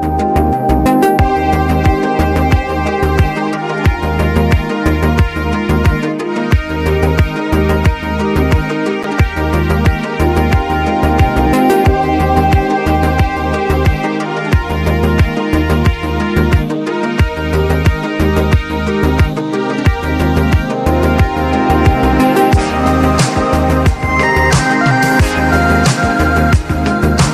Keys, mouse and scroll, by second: 0.5 click, 0.6-1.1 alt+scroll down 2, 1.6 alt+scroll down 1, 2.1 alt+scroll up 1, 2.5 click, 2.7 right click, 3.2 click, 5.1 click, 5.3 right click, 5.9 click, 7.0 alt+scroll down 1, 7.0 typing, 7.7 click, 8.5 click, 9.0-9.5 scroll up 1, 10.0 click, 10.8 scroll up 2, 10.8 typing, 11.5 alt+scroll down 1, 15.4 click, 15.9-17.8 drag, 17.7 typing, 18.9-24.4 drag, 26.0 click, 26.2 alt+scroll down 1, 27.0 ctrl+scroll up 1.